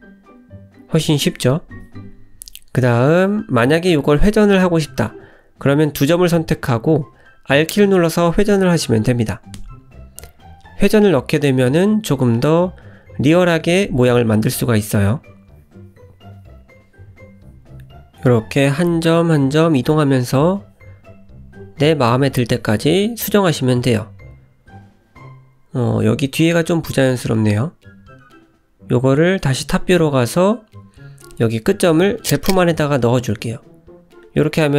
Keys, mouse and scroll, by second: 0.9 Tab, 1.3 middle click, 3.3-4.0 scroll up 2, 4.1 middle click, 4.6 Tab, 5.4 click, 5.9 shift+click, 6.6 click, 7.3 r, 9.5 ctrl+z, 9.9 middle click, 10.8 shift+click, 11.7 middle click, 11.9 middle click, 12.4 r, 14.0 middle click, 14.9 g, 16.1 middle click, 16.9 middle click, 18.0 click, 18.3 shift+middle click, 18.7 middle click, 19.3 click, 20.0 shift+click, 20.6 r, 22.4 middle click, 24.9 r, 26.7 ctrl+z, 27.3 middle click, 28.5 click, 29.1 middle click, 30.8 click, 31.2 `, 32.0 click, 32.3 g, 33.2 click, 33.6 g, 34.3 Tab, 34.5 scroll down 1, 34.6 middle click.